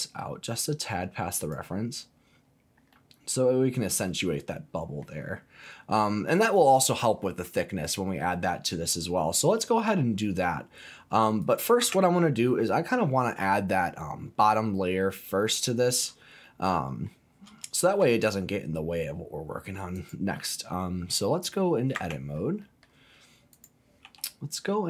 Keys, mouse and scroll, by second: 1.4 click, 2.7 scroll down 1, 2.9-5.0 middle drag, 5.6 middle click, 6.5 click, 8.1-9.2 scroll up 3, 9.2 middle click, 9.6-10.3 scroll down 3, 10.3 middle click, 11.4 click, 11.8 Tab, 12.5 middle click, 14.4 click, 15.0 scroll up 1, 15.1 middle click, 16.0-16.4 scroll up 3, 16.4 middle click, 17.3 scroll down 1, 17.6 shift+middle click, 18.2-19.7 middle drag, 19.9 click, 21.9 Tab, 22.6 middle click, 23.5 click, 24.0 e.